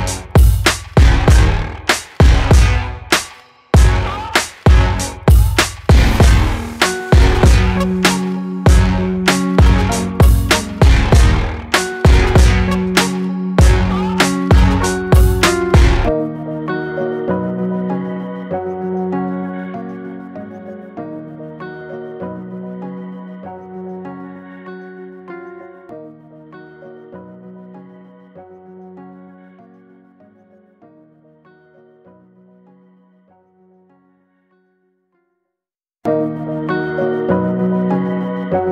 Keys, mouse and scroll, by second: 1.5 click, 1.8-3.1 middle drag, 4.1 click, 4.6 middle click, 5.5-7.3 right drag, 7.8-11.6 drag, 13.7 click, 14.8 g, 21.3 click, 22.0 Tab, 22.6-23.7 right drag, 23.7 Tab, 24.1 Tab, 24.2 click, 24.6-26.2 right drag, 26.2 click, 26.4 scroll down 3, 27.0 click, 27.3 click, 27.7-29.6 middle drag, 29.6-30.0 scroll down 4, 30.0-31.4 middle drag, 31.4 scroll down 2, 32.5 Tab, 33.1 alt+middle click, 33.3 alt+middle click, 33.6 scroll up 2, 34.1 shift+middle click, 34.9 alt+z, 35.3 click.